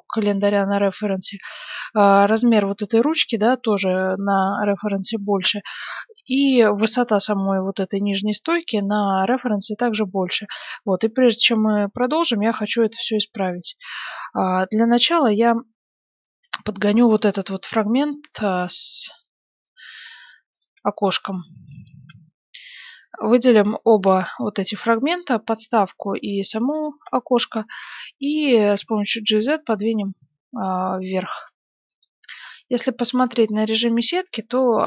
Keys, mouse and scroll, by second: 10.6-12.5 middle drag, 10.6-11.2 scroll down 1, 12.8 g, 15.7-17.4 middle drag, 17.2 KP_Decimal, 17.7-20.6 middle drag, 20.6-22.4 right drag, 22.0 KP_1, 24.0-26.6 middle drag, 27.0 KP_1, 27.6-30.1 middle drag, 28.6 g, 32.2-34.8 middle drag, 32.4 z.